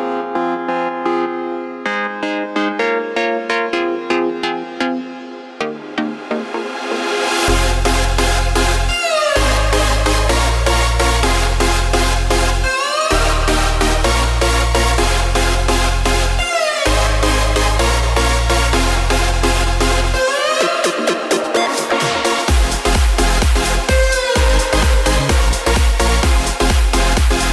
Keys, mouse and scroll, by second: 20.9-26.6 drag.